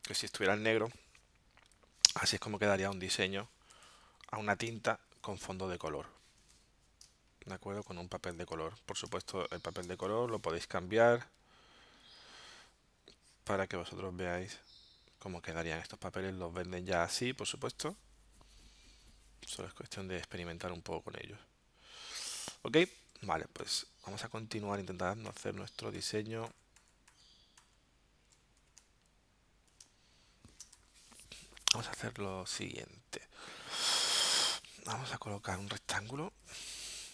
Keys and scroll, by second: 3.7 z, 4.7 space, 7.1 space, 9.1 space, 9.8 space, 23.6 super+z, 24.6 super+z, 25.3 super+z, 26.0 super+z, 28.6 z, 29.8 space, 30.8 v, 36.3 m.